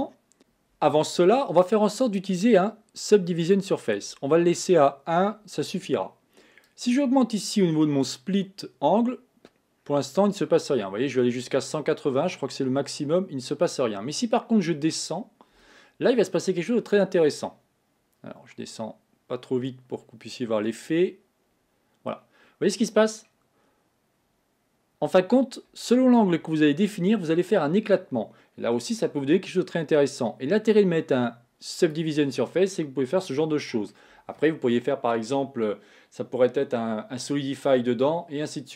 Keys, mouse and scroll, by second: 2.1-5.2 drag, 6.7-9.7 drag, 27.1-30.0 middle drag, 31.8 click, 32.6-35.6 middle drag.